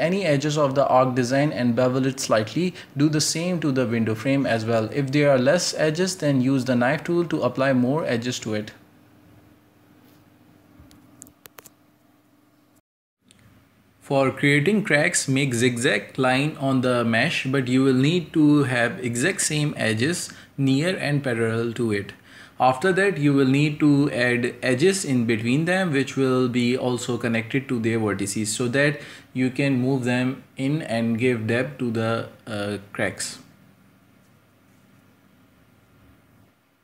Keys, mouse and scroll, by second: 0.0 shift+middle click, 0.5 shift+right click, 1.0 ctrl+b, 1.5 Tab, 1.6 middle click, 1.8 scroll down 3, 1.9-2.4 shift+middle drag, 2.4 scroll up 2, 2.6 right click, 2.6 Tab, 2.8 middle drag, 2.9 right click, 3.5 click, 3.9 j, 4.1 k, 7.1 right click, 7.3 ctrl+b, 7.9 Tab, 8.1 middle click, 8.3 scroll down 4, 8.3-10.3 shift+middle drag, 10.3 scroll up 3, 10.5 Tab, 10.6 shift+middle click, 11.0 scroll up 1, 11.1 a, 11.2 shift+middle click, 11.6 scroll down 3, 11.7 shift+middle click, 11.8-12.4 scroll up 2, 12.0 middle click, 12.4 l, 12.7 scroll down 3, 12.9 middle click, 13.1 scroll up 1, 13.2 shift+middle click, 13.6-14.1 typing, 22.3 scroll up 1, 22.4 shift+middle click, 23.2 a, 23.4 k, 30.8-31.8 middle drag, 34.5 shift+right click, 35.1-35.5 shift+middle drag, 35.5 shift+right click, 35.7 ctrl+z, 35.9 shift+right click, 36.1 ctrl+z, 36.5 shift+right click.